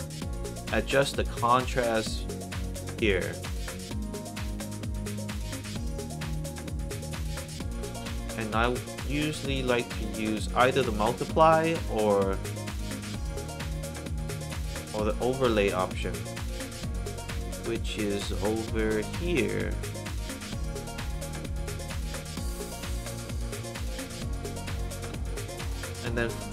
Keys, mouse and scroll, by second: 0.5-2.6 drag, 7.7 click, 10.3 click, 11.6 click, 13.3 click, 19.1 click, 21.5-23.6 drag, 24.5 middle click, 25.3 scroll down 2, 25.6 middle click, 26.1 click.